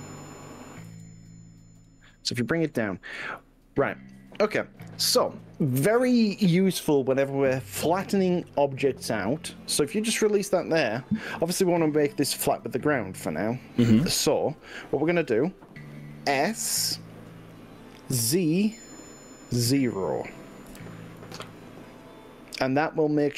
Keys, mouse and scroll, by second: 1.0 g, 9.2 click, 11.2-16.5 middle drag, 16.5 click, 18.4 s, 19.7 z, 20.8 0, 21.6 click, 21.9-23.0 middle drag.